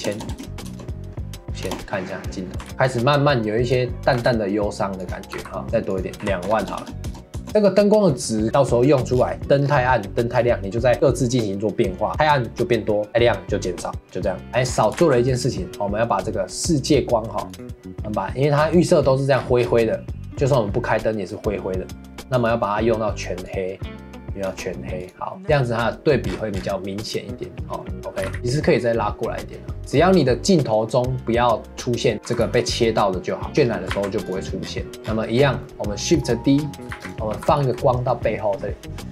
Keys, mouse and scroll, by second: 0.1 KP_0, 0.3 KP_0, 1.7 KP_0, 2.7 ctrl+s, 2.9-3.6 scroll down 3, 3.6 click, 4.2 g, 5.3 g, 5.6 scroll up 3, 5.9 click, 6.6 KP_0, 7.5 scroll down 6, 9.1 scroll down 5, 9.6 scroll up 4, 9.9 middle click, 10.3-10.9 scroll down 3, 14.5 KP_0, 14.7 scroll up 1, 15.0 ctrl+s, 17.5 click, 18.6 scroll down 2, 18.8-19.3 middle drag, 19.4-19.7 scroll down 6, 20.3-22.3 middle drag, 22.3 click, 25.0 click, 25.4 ctrl+s, 26.3 scroll down 6, 27.0 click, 28.2 g, 30.1-32.3 scroll up 4, 32.3 g, 33.5 ctrl+s, 33.6-33.9 scroll up 3, 33.9 ctrl+s, 34.6-35.6 scroll down 14, 34.9 middle click, 35.6-36.9 middle drag, 36.9 shift+d, 37.3 g.